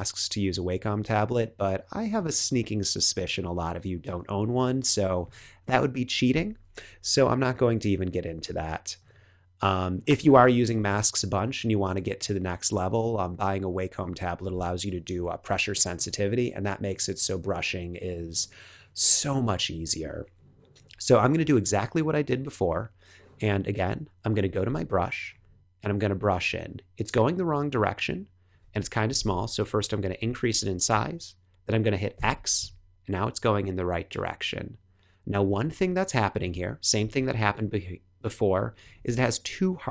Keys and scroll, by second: 6.8 BackSpace, 8.1 BackSpace, 8.6 BackSpace, 15.0 BackSpace, 24.6 b, 29.3 ], 32.1 x, 38.8 super+h.